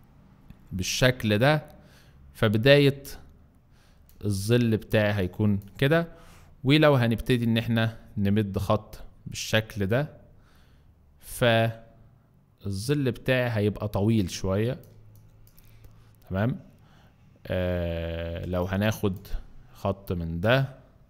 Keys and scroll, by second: 4.1 space, 14.9 space, 18.5 space.